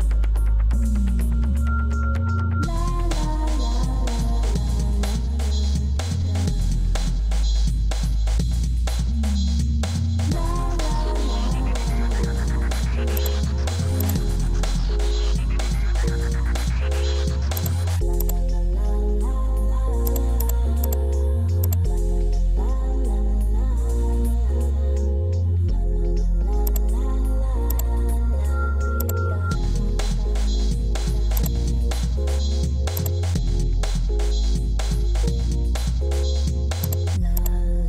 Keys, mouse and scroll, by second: 2.7 Escape.